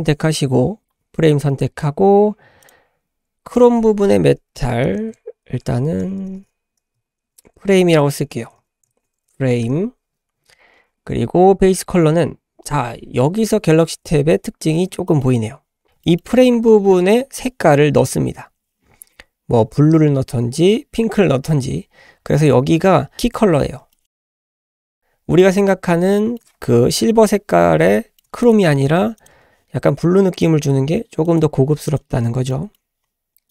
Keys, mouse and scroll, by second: 2.6-3.1 drag, 3.5-10.5 drag, 6.2 BackSpace, 6.3 BackSpace, 8.4 BackSpace, 8.4 BackSpace, 14.6-14.9 scroll down 3, 15.1-15.8 shift+drag, 15.1 shift+middle click, 15.8 scroll up 2, 16.0 shift+middle drag, 16.4-18.2 scroll up 2, 21.7-22.6 scroll down 2, 22.6-23.3 scroll up 2, 23.3-23.8 scroll down 4, 23.9 shift+middle click, 24.5-25.4 scroll up 4, 25.4-25.7 middle drag, 25.7-26.1 scroll up 3, 26.2-27.0 shift+middle drag, 27.0 KP_Decimal, 27.5 scroll up 1, 27.9-28.2 shift+middle drag, 28.4 click, 28.6-29.2 scroll up 1, 29.2 click, 30.3 click, 31.9 click, 32.1-32.5 scroll down 1, 32.5-33.5 middle drag.